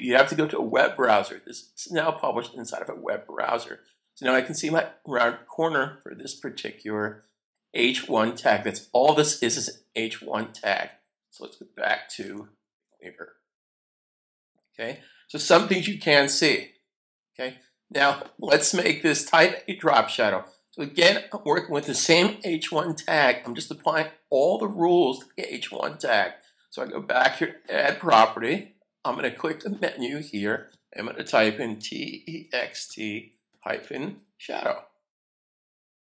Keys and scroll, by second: 12.2 super+Tab, 15.4 super+s, 31.5-34.7 typing, 35.1 Return.